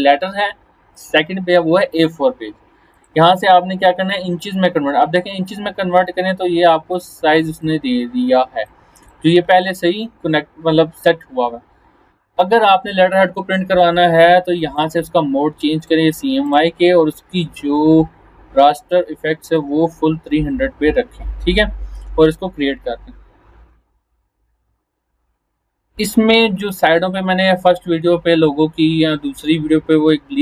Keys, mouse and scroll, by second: 6.9-7.8 drag, 11.6 scroll down 1, 14.7 click, 19.5 click, 20.9-21.3 scroll down 1, 22.2 click.